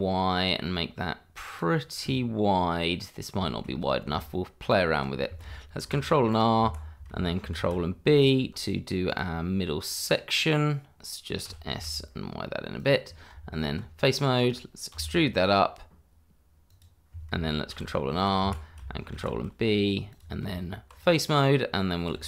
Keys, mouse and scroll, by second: 1.4 click, 2.0 scroll down 1, 2.5-3.4 scroll up 1, 3.4 shift+middle click, 3.7-4.0 scroll up 1, 4.0 Tab, 6.3 click, 6.6 Escape, 7.5 ctrl+b, 9.1 click, 9.3-9.8 scroll down 1, 9.8 middle click, 11.2-12.0 scroll up 1, 12.0 scroll up 1, 12.2 s, 12.9 click, 14.0 click, 16.7 click, 18.0 ctrl+r, 18.2 click, 18.4 Escape, 19.1 ctrl+b, 20.1 click, 20.4 Tab, 21.2 click.